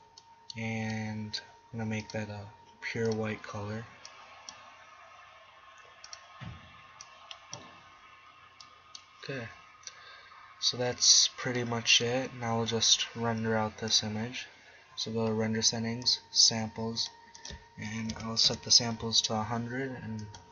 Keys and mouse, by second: 8.4 middle click, 13.9-15.5 drag, 15.7-16.1 middle drag, 16.1-18.6 drag, 18.8-20.2 middle drag.